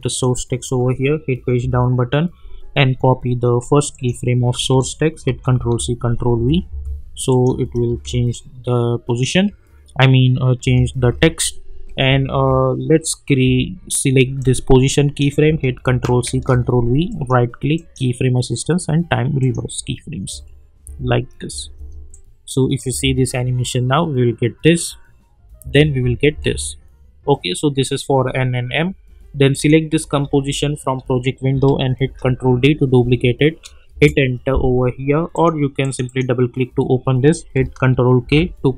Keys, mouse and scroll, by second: 1.6 Page_Down, 3.9 click, 5.2 ctrl+c, 5.6 ctrl+v, 6.3 space, 7.3 click, 7.4 space, 8.3-9.2 drag, 10.6 space, 12.0 j, 12.3 j, 13.4 j, 14.4-15.3 drag, 15.8 ctrl+c, 16.3 ctrl+v, 17.1 right click, 17.7 click, 19.5 click, 20.3 space, 22.1-23.0 click, 22.9 space, 25.6 space, 29.5 click, 32.0 ctrl+d, 33.9 Return, 35.3 click, 38.2 ctrl+k.